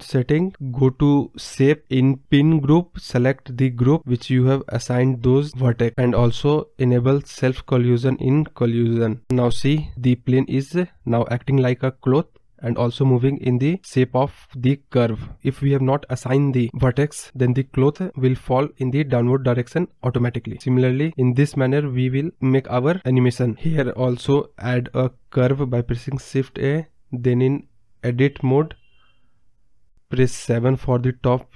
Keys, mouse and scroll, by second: 0.2-0.7 drag, 0.7-1.0 scroll down 3, 1.0 click, 1.3-1.7 scroll down 3, 1.7-2.9 drag, 2.9-4.0 scroll down 5, 4.0-4.3 drag, 4.3-6.7 scroll down 9, 4.8 click, 6.7-9.4 drag, 9.4 scroll up 1, 9.6-10.0 middle drag, 10.0 space, 12.5 space, 23.7-24.6 middle drag, 24.6 scroll down 1, 24.9 scroll up 1, 26.3 shift+a, 27.8 scroll up 2, 28.0 middle click, 28.8 scroll down 2, 29.9 Tab, 30.3 middle click, 30.8 KP_0, 31.2 ctrl+z, 31.4 middle click.